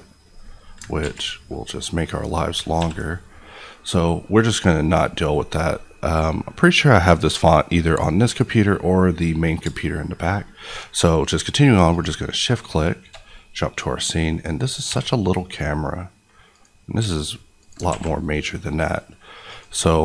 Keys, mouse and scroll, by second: 1.0 ctrl+z, 1.5 middle click, 2.5 ctrl+scroll down 1, 2.7 ctrl+s, 5.0 click, 9.6 shift+click, 13.3-13.9 scroll up 1, 14.4-14.9 scroll down 1, 14.9 s, 16.5 click, 17.0 s, 17.6 click, 17.8 alt+a, 19.5 click.